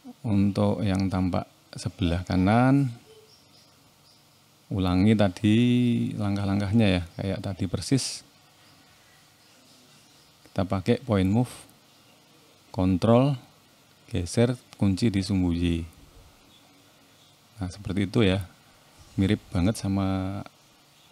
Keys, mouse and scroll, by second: 0.0 r, 3.8 middle click, 4.5-5.3 scroll up 1, 5.3 click, 6.3 middle click, 9.2 shift+middle click, 10.5 click, 15.5 click, 15.8 middle click, 18.5 KP_3, 19.9 middle click.